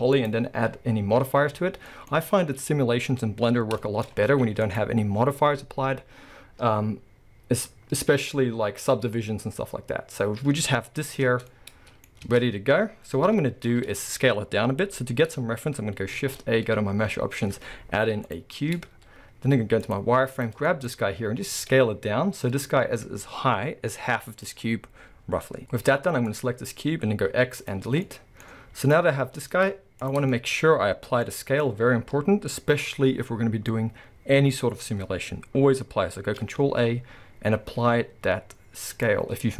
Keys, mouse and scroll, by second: 0.1-1.9 drag, 1.8 scroll down 2, 1.9-4.6 middle drag, 2.6 KP_1, 4.1 scroll up 2, 4.3 alt+a, 4.6 click, 8.4 scroll up 1, 9.5-10.2 scroll down 1, 11.2 Tab, 11.5-16.2 middle drag, 12.2 Tab, 12.4-13.3 scroll down 1, 13.3 KP_1, 16.2 shift+a, 19.3 z, 20.4 drag, 20.7 shift+middle click, 20.8-21.3 scroll up 1, 21.3 s, 24.5 click, 26.3 click, 27.3 x, 28.1-28.8 middle drag, 28.8 click, 29.3 z, 30.3-39.5 shift+middle drag, 30.6-31.2 scroll up 2, 31.6-35.8 scroll up 2, 36.6 ctrl+a.